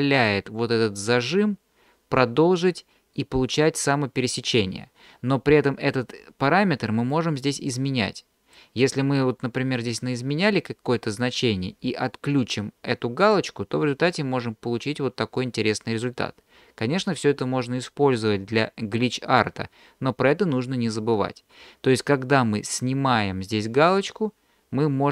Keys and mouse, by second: 7.2-8.6 drag, 13.2 click, 24.0-25.1 drag.